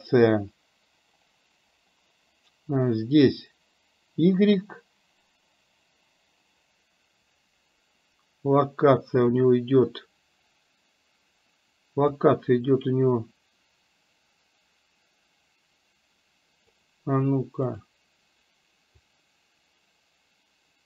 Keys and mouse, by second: 12.5-16.9 drag, 17.9 click, 19.3-20.8 drag.